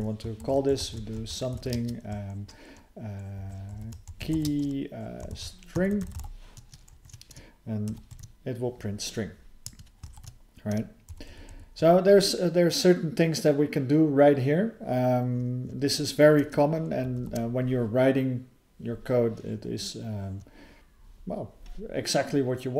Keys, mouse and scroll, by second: 0.4 (, 3.4 {, 5.3 ", 8.1 ctrl+e, 10.1 ctrl+s, 16.9 alt+b, 17.2 alt+b.